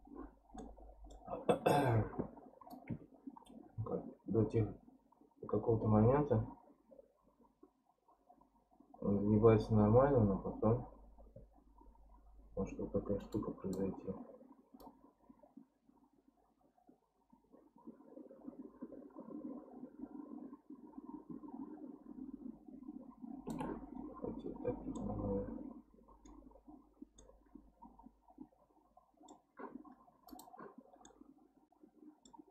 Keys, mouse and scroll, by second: 0.6-2.7 middle drag, 2.7-5.7 drag, 14.8-17.9 shift+drag, 23.9-25.0 scroll down 11, 25.0-26.5 middle drag, 26.5-27.2 scroll up 10, 27.2-30.3 middle drag, 30.3 click, 30.8 scroll down 1, 31.1-32.5 middle drag.